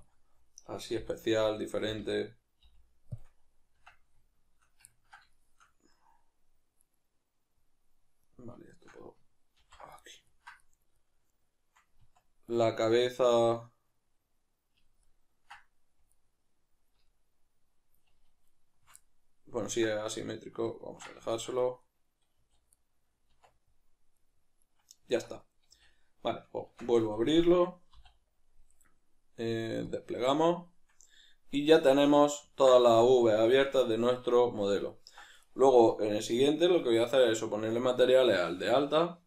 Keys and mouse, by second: 0.5 right click, 0.9 l, 2.6 x, 4.9-6.8 ctrl+middle drag, 6.8 right click, 8.7 shift+right click, 9.6 ctrl+j, 10.0-11.3 ctrl+middle drag, 11.3 right click, 12.0 Tab, 12.6-16.1 middle drag, 16.1 alt+right click, 17.1-18.5 middle drag, 18.5-19.0 alt+shift+right drag, 19.0-24.2 middle drag, 22.4 a, 23.3 Tab, 24.2-25.4 right drag, 32.2-35.4 middle drag, 35.4 right click.